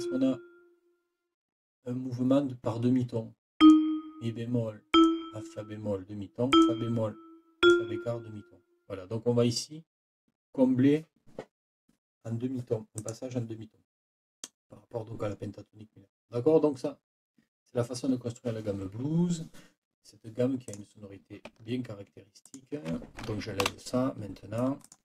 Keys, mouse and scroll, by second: 3.6 click, 4.9 click, 6.5 click, 7.6 click, 13.0 click, 20.7 click, 22.5 shift+click, 23.6 Delete, 24.8 click.